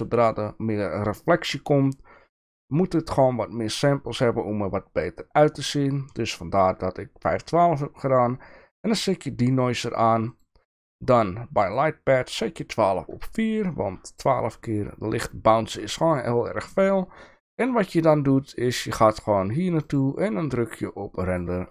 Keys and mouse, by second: 10.3 click, 11.7 click, 20.0-21.7 drag.